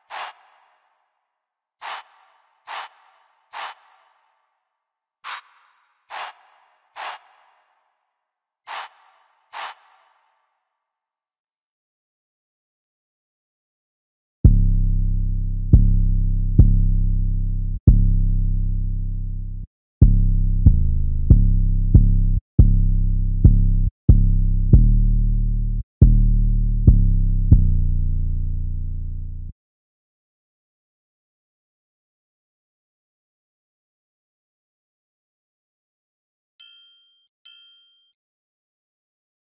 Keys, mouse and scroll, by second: 11.5 F1, 30.7 F1.